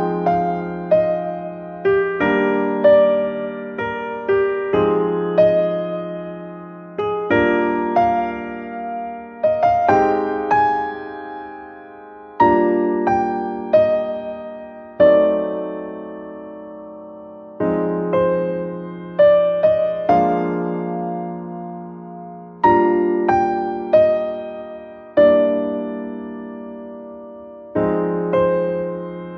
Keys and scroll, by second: 23.9 shift+BackSpace.